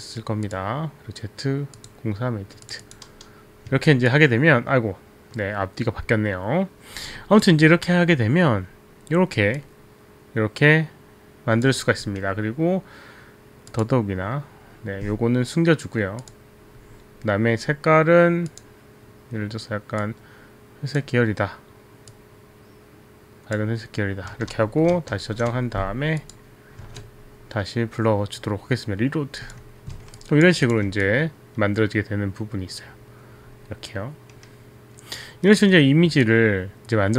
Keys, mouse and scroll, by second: 0.6 click, 1.8 click, 2.6 click, 3.1 click, 3.7 click, 4.1 alt+click, 9.5 alt+drag, 13.7 click, 16.2 click, 19.1 click, 20.5 click, 22.5 click, 26.2 ?, 26.9 alt+Tab, 29.5 click, 30.2 alt+click, 30.6 click, 31.1 alt+click, 35.4 alt+right click, 36.5 alt+click.